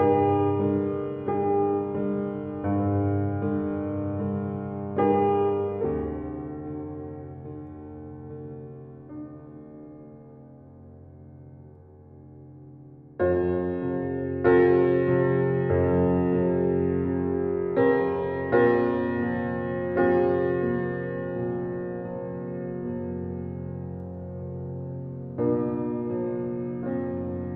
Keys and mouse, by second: 0.7 click, 2.8 click, 4.2 click, 4.7 click, 5.7 click, 6.2 click, 7.1 click, 8.8 click, 9.8-13.0 drag, 13.8 click, 14.5 click, 14.9 click, 15.4 click, 16.0 click, 18.1 click, 18.7 ctrl+alt+click, 19.7 ctrl+alt+click, 20.7 ctrl+z, 22.6 click, 23.2 click, 24.1 click, 24.7 click, 27.4 click.